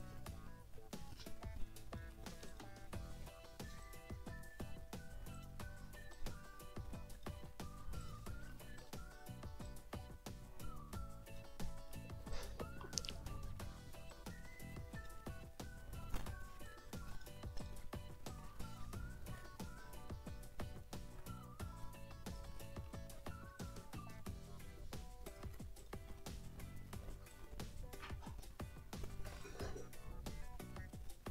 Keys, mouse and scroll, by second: 0.0-2.2 drag, 2.5 click, 3.8-4.8 drag, 5.3 click, 6.1-7.4 drag, 7.6 ctrl+scroll down 2, 8.0 ctrl+click, 8.3 ctrl+middle click, 8.8 ctrl+click, 9.6-11.6 drag, 11.8 middle click, 12.3 ctrl+shift+click, 12.6 ctrl+shift+scroll down 2, 12.8 ctrl+shift+middle click, 13.7 ctrl+d, 14.1 ctrl+click, 14.6 click, 16.8 ctrl+click, 17.8 ctrl+click, 17.8 ctrl+scroll up 2, 18.4 ctrl+click, 22.6 ctrl+scroll up 2, 22.9 ctrl+click, 23.0 ctrl+scroll down 1, 23.6 ctrl+shift+click, 24.0 ctrl+shift+click, 24.2 ctrl+shift+middle click, 25.3 click, 25.8 ctrl+shift+click, 26.4 ctrl+middle click, 26.9 ctrl+d, 27.3-28.6 ctrl+drag, 28.7 click, 29.4-31.3 drag.